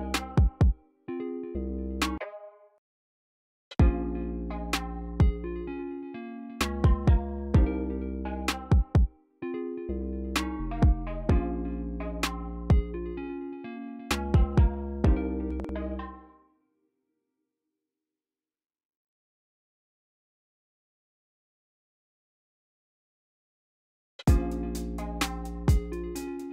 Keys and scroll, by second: 0.0-0.5 typing, 2.1 super+j, 2.7 Return, 3.6 space, 6.0-6.9 typing, 15.4-15.9 typing, 18.0 y, 19.5 y, 20.4 e, 24.1-25.1 typing.